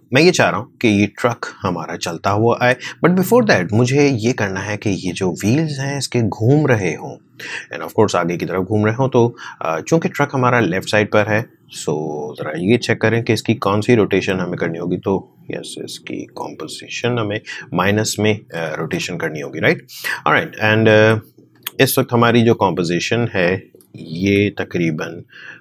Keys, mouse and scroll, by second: 3.4 click, 13.0 r, 14.2-18.7 drag, 18.7 ctrl+z, 23.6 ctrl+z, 24.1 ctrl+k.